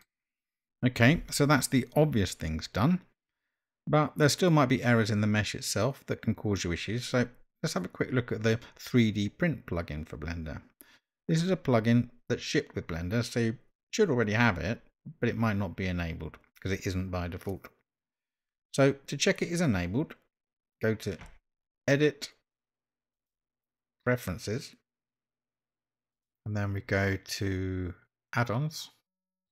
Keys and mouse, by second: 23.1-28.1 drag.